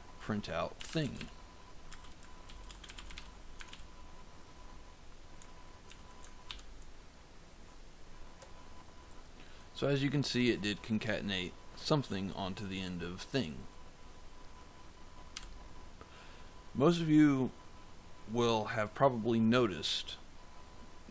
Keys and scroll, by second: 0.0-3.6 typing, 5.8 ctrl+s, 6.4 ctrl+F5, 15.2 f.